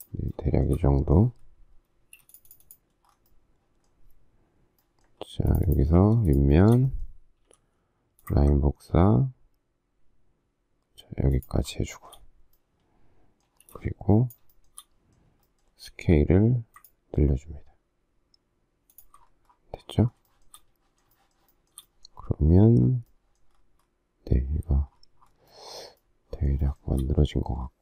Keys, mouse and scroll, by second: 1.9 space, 6.2 shift+click, 6.5 shift+middle click, 6.6 shift+double middle click, 7.4 m, 12.0 shift+middle click, 13.4 space, 14.5 shift+middle click, 15.7 s, 16.8 ctrl+click, 18.9 ctrl+click, 20.2 shift+middle click, 21.1 shift+middle click, 21.5 shift+middle click, 21.8 shift+double middle click, 25.9 shift+middle click, 26.6 shift+middle click.